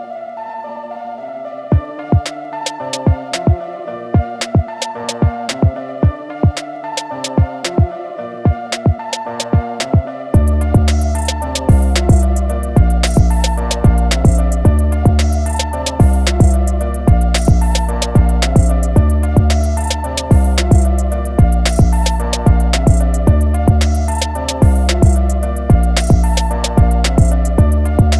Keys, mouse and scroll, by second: 3.1 click, 4.6 a, 4.7 click, 11.1 BackSpace, 11.5 click, 16.9 click, 21.0 a, 21.4 click.